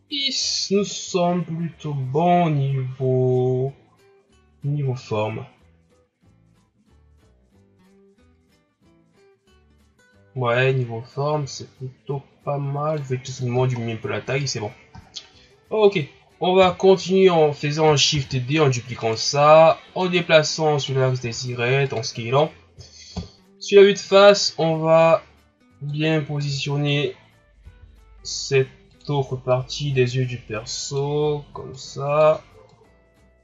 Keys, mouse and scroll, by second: 7.5 scroll up 3, 11.3 s, 13.4-14.0 scroll down 2, 14.3 scroll up 3, 15.1-15.8 shift+scroll up 6, 16.6 KP_3, 18.2 shift+d, 20.0-21.2 drag, 21.2 s, 23.2 KP_1, 25.1-27.2 drag, 27.2-27.6 scroll up 1, 27.6 s, 29.5-33.4 drag.